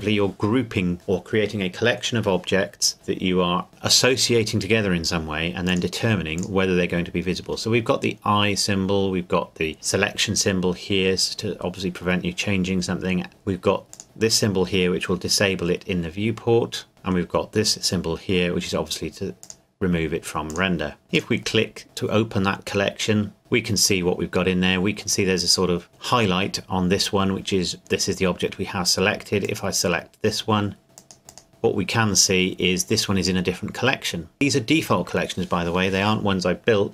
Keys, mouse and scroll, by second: 5.7 click, 13.9 click, 19.4 click, 21.1 click, 29.4 click, 31.0 click.